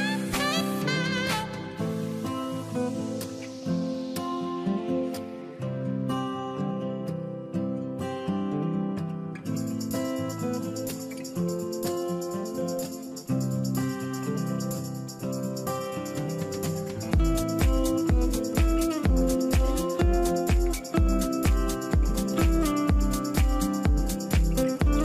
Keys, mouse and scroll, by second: 14.7 shift+m, 14.9 shift+r, 15.3 shift+w, 15.8 Return, 16.4 Return, 18.1 1, 24.4 space.